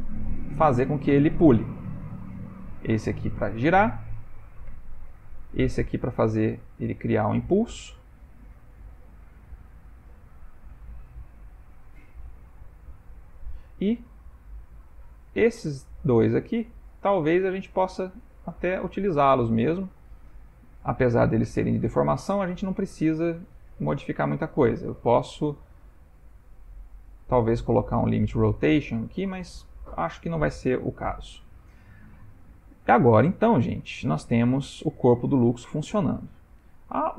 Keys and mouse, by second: 3.1 click, 3.3 r, 4.6 click, 4.8 r, 5.8 click, 6.4 g, 8.2 s, 10.3 g, 14.1-15.3 shift+middle click, 14.8-15.2 ctrl+middle click, 15.3 shift+middle click, 16.1 click, 16.7 middle click, 18.4 middle click, 18.8 shift+middle click, 19.3 middle click, 20.2 ctrl+middle click, 20.8 middle click, 21.6 click, 22.1 r, 24.0 click, 24.5 r, 27.5 ctrl+middle click, 28.3 middle click, 29.7 ctrl+middle click, 30.1 shift+middle click, 30.9 middle click, 31.3 middle click, 33.0 middle click, 34.6 ctrl+middle click, 35.5 shift+middle click, 36.0 ctrl+middle click, 36.7 shift+middle click.